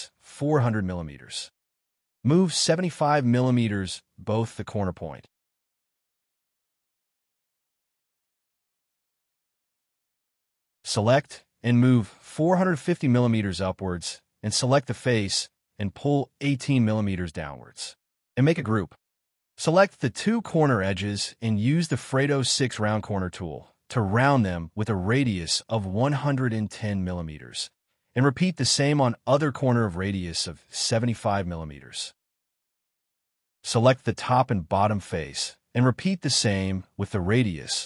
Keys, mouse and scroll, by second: 0.2 scroll up 1, 1.9 space, 2.4 m, 4.3-5.2 typing, 6.6 5, 6.8 Return, 7.2 scroll down 1, 7.4 space, 8.5 middle click, 9.1 Up, 9.6-11.8 typing, 12.3 middle click, 13.8 scroll up 1, 14.2 middle click, 15.0 p, 15.1 scroll up 1, 17.4 8, 17.6 Return, 18.2 space, 18.2 double click, 19.1 g, 19.3 double click, 19.7 ctrl+click, 22.1-24.7 typing, 25.3 middle click, 26.2 space, 26.6 shift+click, 29.0 5, 31.0-31.8 typing, 32.5 middle click, 32.6 scroll up 1, 33.1 ctrl+c, 33.3 double click, 33.6 shift+click, 34.7-36.8 typing, 36.8 scroll up 1, 36.9 middle click, 37.0 ctrl+z, 37.4 middle click.